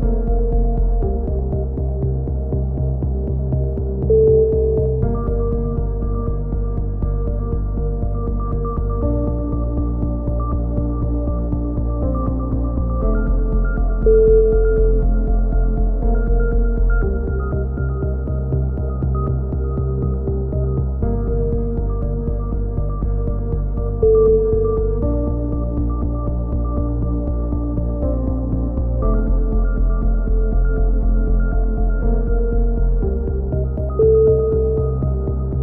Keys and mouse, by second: 0.0 right click, 0.2 click, 1.0 ctrl+z, 1.0-2.9 drag, 3.0-4.2 drag, 3.2 right click, 4.4 right click, 4.7-6.9 drag, 5.4-8.0 typing, 5.8 right click, 7.1 click, 8.1 click, 9.3 click, 10.3 click, 10.5 KP_1, 10.7 z, 10.8 z, 10.9 click, 13.2-14.4 drag, 14.4 KP_1, 14.6 z, 14.9 ctrl+r, 16.1 a, 16.2 z, 16.6 click, 16.9 right click, 17.2 shift+d, 17.6 click, 18.3 ctrl+z, 18.8 e, 19.3 click, 21.1 click, 21.7 right click, 22.0 z, 22.2 click, 22.4 right click, 23.7 click, 24.3-25.7 drag, 25.2 a, 25.3 z, 27.9 click, 28.2 right click, 30.5 KP_1, 30.7 z, 31.3 g, 32.4 click, 32.4 a, 32.4 z, 35.1-35.6 drag.